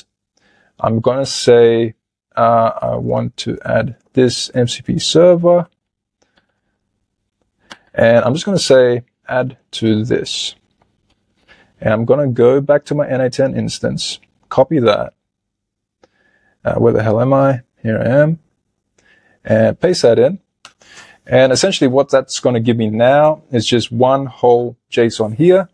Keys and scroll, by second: 4.1-5.7 typing, 6.4 shift+Return, 6.8 super+v, 7.7 shift+Return, 10.7 shift+;, 11.1 shift+Return, 13.7 super+a, 13.9 super+c, 19.1 super+v.